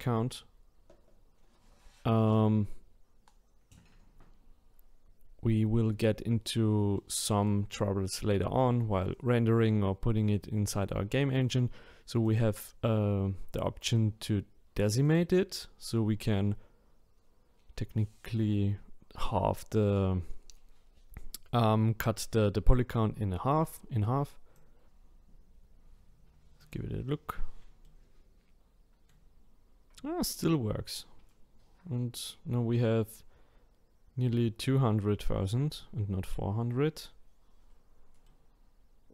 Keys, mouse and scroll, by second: 6.9-11.3 middle drag, 12.2-15.2 drag, 24.5 click, 26.6 click, 27.8-30.9 middle drag, 38.2-39.1 middle drag.